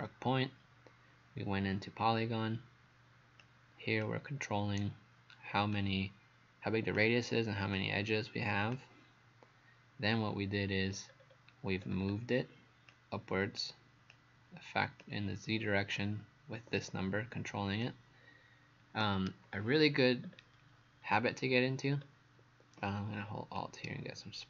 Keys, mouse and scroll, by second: 3.4 click, 11.1-11.5 scroll down 2, 11.8 scroll down 1, 12.9 click, 20.3-21.2 scroll down 2, 21.2 scroll down 1, 21.9-23.4 scroll up 2, 23.6 alt+click.